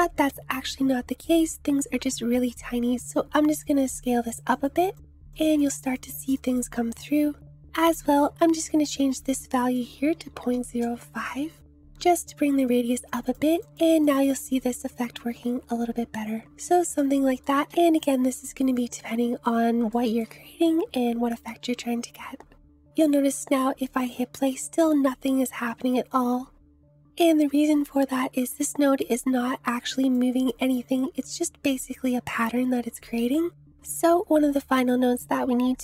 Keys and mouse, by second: 3.6 click, 3.8 click, 4.5 click, 4.8 click, 5.5 click, 5.9 click, 6.1 click, 6.3 click, 6.5 click, 7.7-11.9 drag, 9.1 Delete, 13.1 click, 13.3 click, 13.4 click, 13.6 click, 13.9 click, 14.1 click, 18.7 click, 19.9 shift+click, 22.8 space, 23.0 space, 24.0 space, 25.9 space, 28.4-30.2 drag.